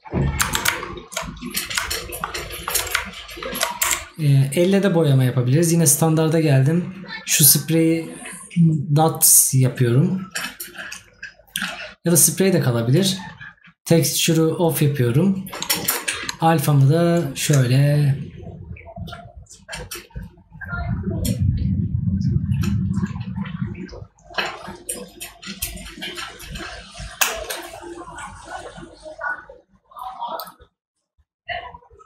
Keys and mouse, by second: 2.0 right click.